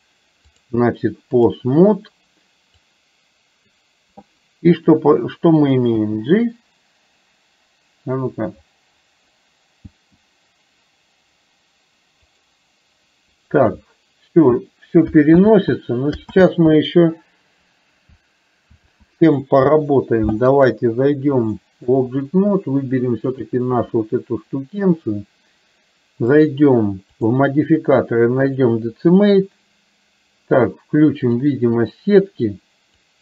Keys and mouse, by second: 0.6-1.7 drag, 3.3-4.4 drag, 13.7 click, 15.7 ctrl+z, 16.7 ctrl+z, 19.2 ctrl+z, 21.4 click, 23.3 click, 27.3-28.7 drag, 33.1-33.2 drag.